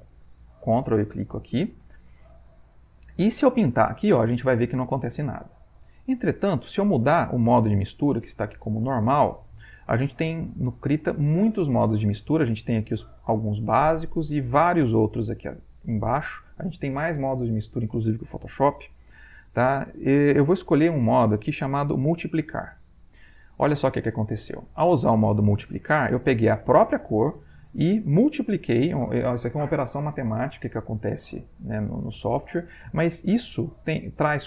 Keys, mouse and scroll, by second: 0.1 ctrl+click, 0.8 ctrl+click, 4.1-6.3 drag, 9.4 click, 22.4 click.